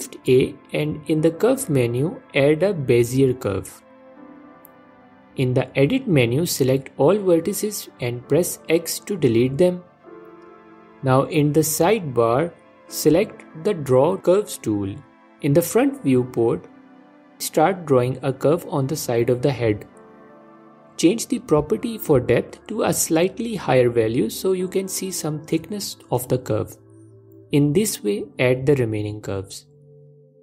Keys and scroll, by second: 5.1 ctrl+Tab, 7.5 x.